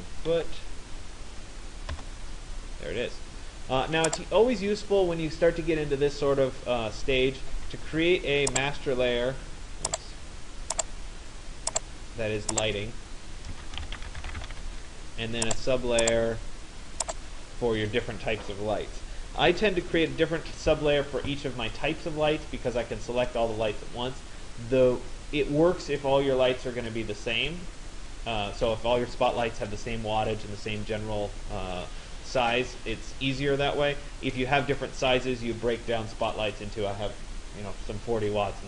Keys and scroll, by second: 1.9 Return.